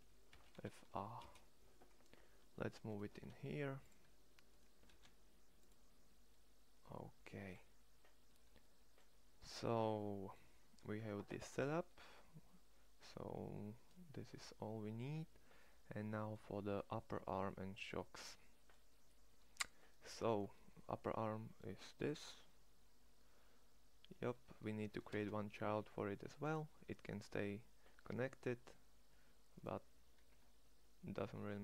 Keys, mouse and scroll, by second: 2.9 shift+s, 4.7 shift+s, 15.3 middle click, 15.7 middle click, 17.9 middle click, 18.1-19.5 middle drag, 20.3 middle click, 20.5 middle click, 24.7 e.